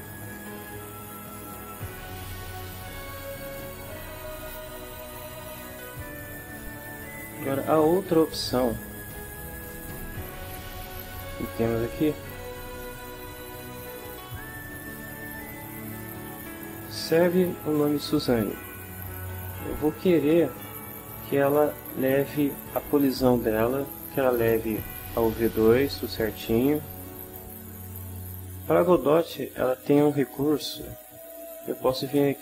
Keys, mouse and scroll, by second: 1.4-2.4 middle drag, 7.0 click, 9.9 click, 19.9-21.3 ctrl+middle drag.